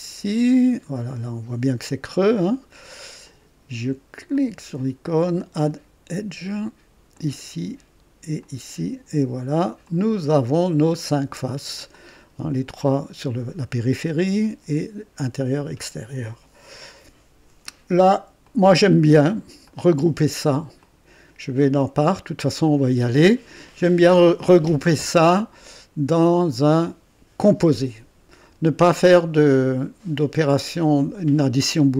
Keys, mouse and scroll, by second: 1.0 right click, 2.0 scroll up 1, 2.5 right click, 4.3 click, 5.4 click, 7.1 click, 8.3 click, 9.8 click, 10.7 scroll down 1, 11.9 click, 13.9 click, 18.4 click, 19.6 shift+click, 20.8 click, 22.8 click, 26.3 click.